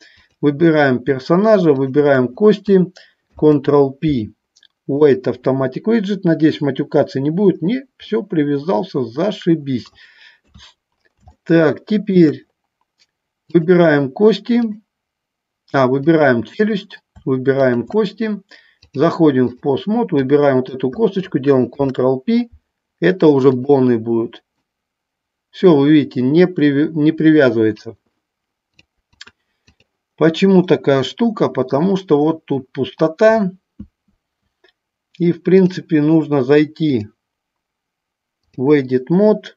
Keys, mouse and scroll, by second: 0.3 click, 3.4 ctrl+p, 8.3-10.1 middle drag, 10.6 KP_3, 11.6 middle click, 13.7 click, 16.2 click, 17.7 shift+click, 19.0 click, 20.4 click, 21.9 ctrl+p, 24.9-28.0 drag, 29.5 click, 30.8-32.0 middle drag, 35.8 click, 37.3-38.8 drag.